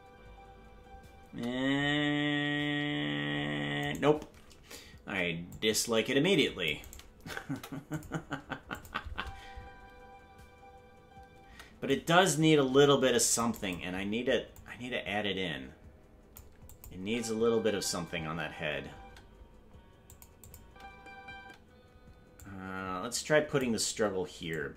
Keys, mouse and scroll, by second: 3.8-5.0 right drag, 3.8 space, 5.0 c, 7.5 Delete, 8.7 click, 9.1 space, 11.9-13.6 drag, 11.9 space, 14.6-16.4 drag, 16.7 click, 17.0 space, 20.1 click, 20.1 space, 20.4 click, 20.6 space, 21.7 space, 22.4-23.6 drag, 24.5 click.